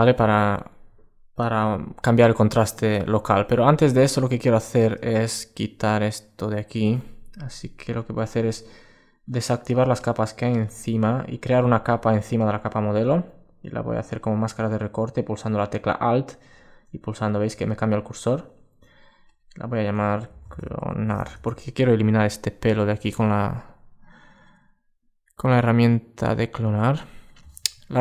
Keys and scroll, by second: 1.5 super+space.